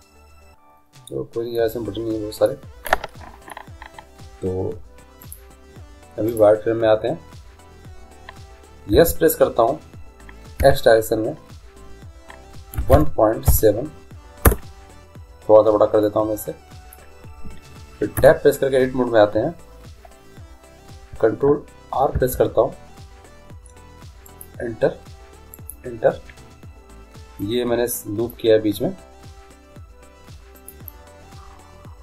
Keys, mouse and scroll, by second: 0.7-4.1 middle drag, 5.2-7.0 drag, 8.9 s, 16.0 middle click, 18.2 Tab, 22.1 ctrl+r.